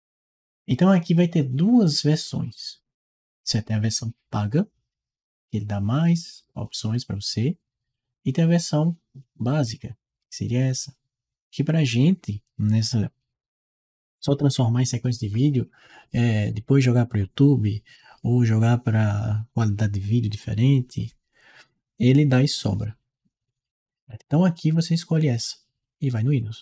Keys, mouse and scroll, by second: 26.2 click.